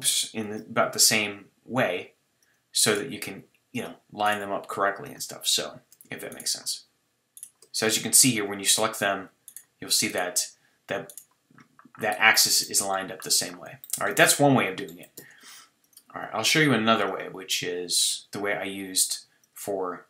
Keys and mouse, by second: 0.1-3.1 drag, 0.5 ctrl+r, 3.1 g, 4.4 g, 11.6-13.2 middle drag, 13.5 middle click, 13.8 middle click, 15.2 Tab, 17.1-19.7 drag.